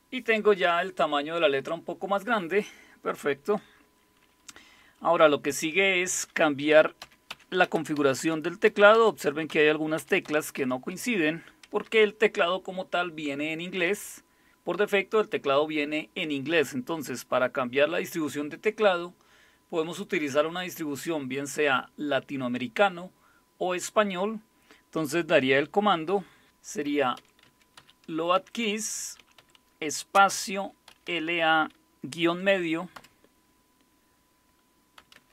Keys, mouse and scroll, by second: 7.4-8.9 typing, 10.0-13.8 typing, 26.6-31.6 typing, 32.9 typing, 35.0-35.3 typing.